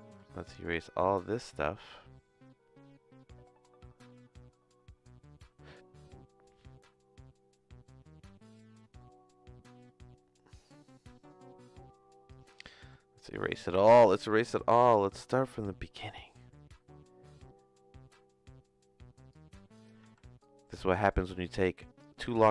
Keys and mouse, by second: 0.0 x, 0.5 click, 1.2 x, 12.3 click, 12.8 x, 13.3 click, 19.4 click, 20.0 x, 20.4 click, 21.2-22.5 typing, 21.6 click.